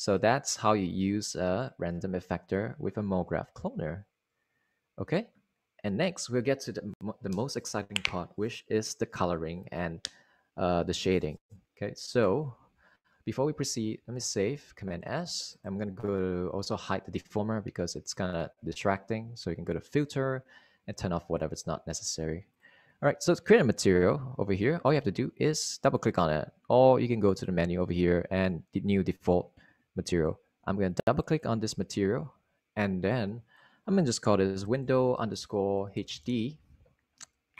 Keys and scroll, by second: 14.5 super+s, 34.9-37.5 typing.